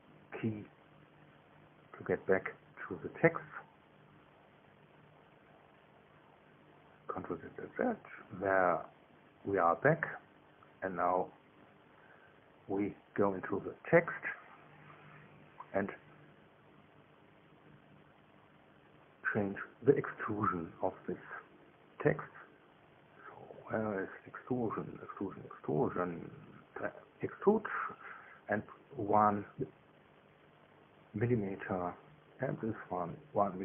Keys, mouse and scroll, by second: 6.9 ctrl+z, 7.5 ctrl+z, 7.8 ctrl+z, 10.5 ctrl+Tab, 11.1 ctrl+z, 11.3 ctrl+z, 11.5 ctrl+z, 11.7 ctrl+z, 16.1-17.4 drag, 17.4 right click, 19.6 z, 27.4 click, 29.0 KP_1, 30.0 KP_Enter, 32.9 right click.